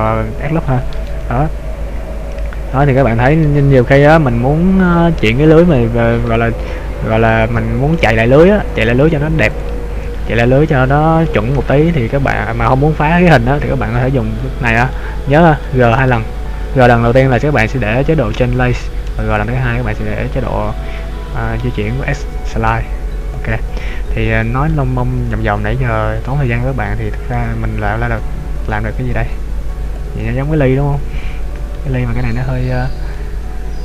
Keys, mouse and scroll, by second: 9.6 click, 15.0 middle click, 16.3 g, 23.3 click, 23.9-24.3 scroll down 2, 24.2 scroll up 1, 24.6-25.1 scroll down 1, 25.1 scroll down 1, 25.4 middle click, 27.8 a, 29.0 Tab, 29.6-30.1 scroll down 1, 30.1 click, 30.4 middle click, 32.6 shift+middle click, 33.2 middle click.